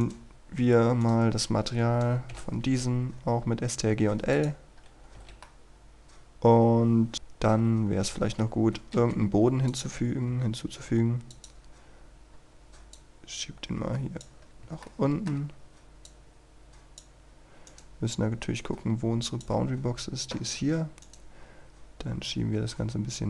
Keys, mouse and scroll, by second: 0.1 shift+right click, 1.1 shift+right click, 2.3 ctrl+i, 4.4 click, 4.9 scroll down 1, 5.5-7.1 middle drag, 7.5 KP_1, 8.0 scroll down 1, 8.3-8.7 scroll up 1, 9.7 click, 11.6-12.3 scroll down 1, 12.3-12.7 scroll up 1, 12.9-14.4 drag, 14.4 scroll up 1, 14.9 shift+middle click, 15.5-16.1 scroll up 1, 16.1 click, 17.2-17.6 scroll down 1, 17.7 right click, 18.6 click, 19.8-21.1 scroll down 1, 21.1 right click, 21.4-22.3 scroll up 1, 22.3-23.2 drag.